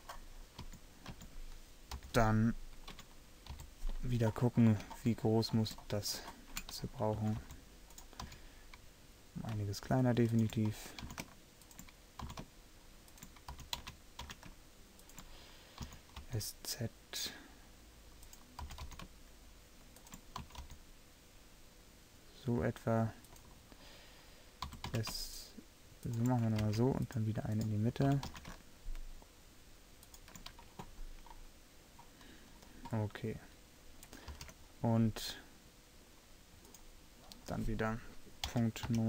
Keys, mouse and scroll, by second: 0.7-3.6 typing, 5.5 middle click, 5.9 middle click, 7.3 s, 8.3 s, 11.2 s, 12.3 s, 13.6 g, 16.4 s, 18.8 g, 20.5 s, 24.7 s, 26.7 ctrl+r, 28.2 s, 31.4-34.4 middle drag, 34.4 ctrl+r.